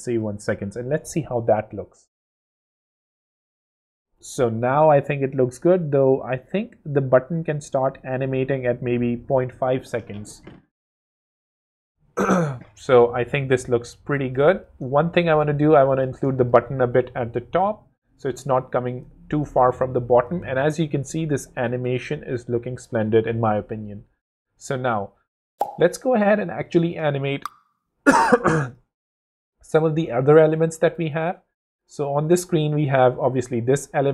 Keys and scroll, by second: 0.3 w, 9.6 w, 16.6 shift+w, 17.2 w, 19.9 w, 29.3 space, 32.8 0.